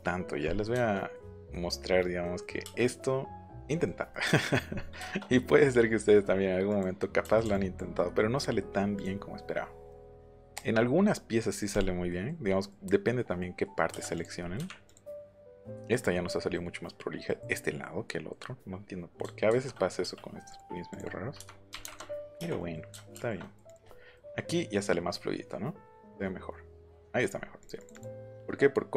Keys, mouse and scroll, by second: 2.4 middle click, 2.4-2.7 scroll, 2.6 middle click, 2.7 space, 6.6 click, 7.5 ctrl+click, 8.9 click, 9.8 scroll up 1, 9.9 scroll down 1, 10.0-10.4 scroll up 2, 10.4 scroll down 1, 11.7 click, 12.0 scroll down 1, 12.4 middle click, 13.1 scroll up 1, 13.3 scroll down 1, 14.1 click, 14.4 middle click, 14.5 Delete, 14.8 click, 15.1 middle click, 16.5 middle click, 17.2 middle click, 19.4 ctrl+c, 20.5 click, 21.3 KP_Subtract, 21.7 KP_1, 21.8 KP_Enter, 22.5 click, 23.4 click, 23.6 click, 27.3 middle click, 27.5 click, 27.7 click, 27.9 click, 28.1 middle click.